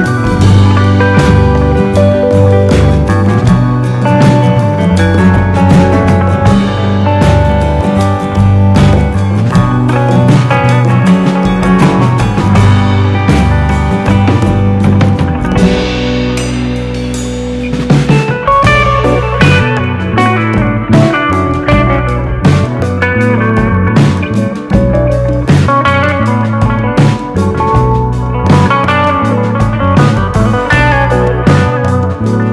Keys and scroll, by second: 20.8 super+d, 23.9 super+d, 24.5 super+d.